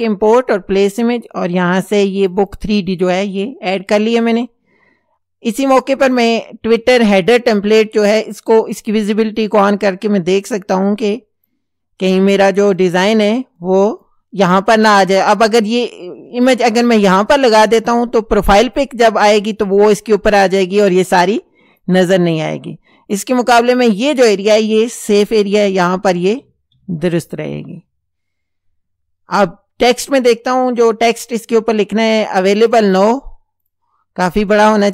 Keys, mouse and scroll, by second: 0.9 click, 2.3 click, 8.5 click, 10.8-11.7 drag, 12.3-13.0 drag, 13.6-14.2 drag, 21.0 click, 22.6 click, 25.5 Up, 30.8 click, 32.2 click, 32.8 right click, 33.7 click.